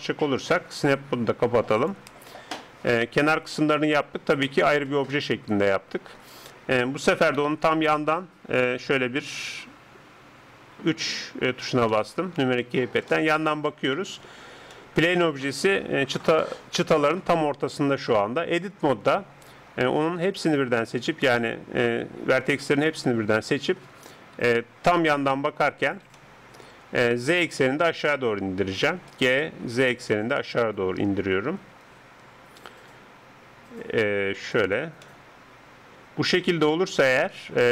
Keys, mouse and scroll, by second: 1.8-4.7 drag, 2.8 middle click, 4.7 Tab, 5.1-7.9 middle drag, 7.4 KP_3, 11.3-11.9 scroll up 1, 11.9-17.3 middle drag, 18.5 Tab, 20.0 a, 20.3 a, 21.5-24.4 middle drag, 24.4 KP_3, 26.1-28.0 middle drag, 29.0 g, 35.0-37.1 middle drag.